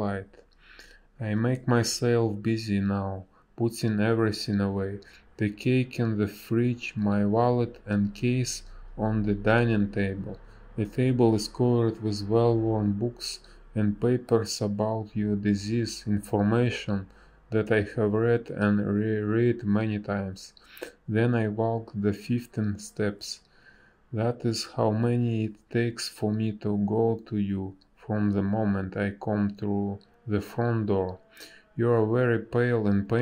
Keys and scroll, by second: 6.0 space, 10.5 space, 23.4 space, 30.6 space, 31.5 space.